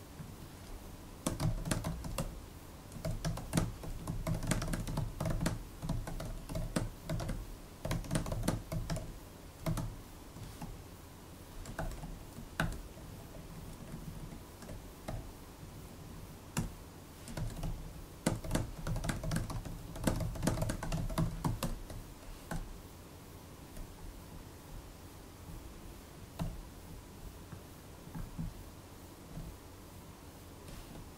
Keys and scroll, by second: 1.0-10.2 typing, 11.7 shift+-, 11.9 alt+BackSpace, 12.5 shift+-, 12.9 alt+BackSpace, 13.3 alt+Left, 13.4 alt+Left, 13.8 alt+shift+Right, 13.9 alt+shift+Right, 15.0 super+b, 15.5-22.0 typing, 22.4 super+p, 26.2 super+e, 29.2 super+e, 30.8 super+p.